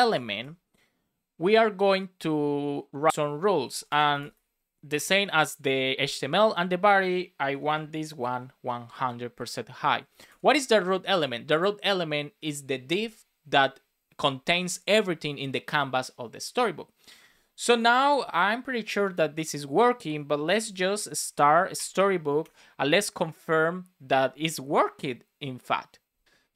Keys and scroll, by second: 0.1 shift+[, 0.4 Return, 4.9 Return, 8.1 shift+5, 8.9 Right, 9.9 Up, 10.2 shift+super+Left, 11.1 super+s, 20.7 space, 21.7 Return.